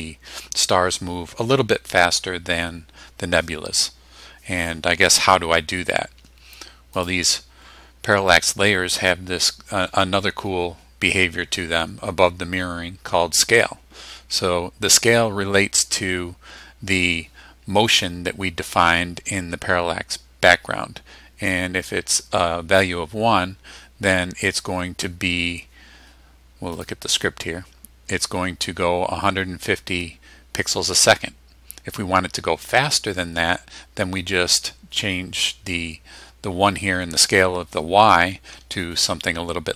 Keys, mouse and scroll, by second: 7.0 click, 26.8 click.